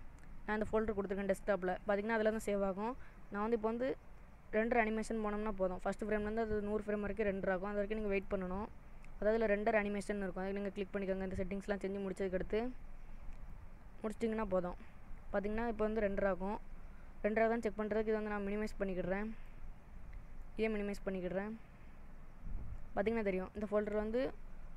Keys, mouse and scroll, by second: 8.1 click.